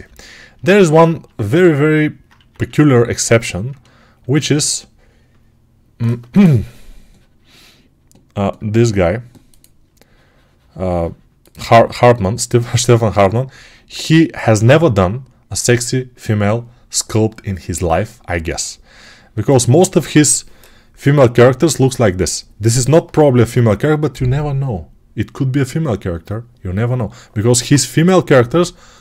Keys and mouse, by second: 2.2 1.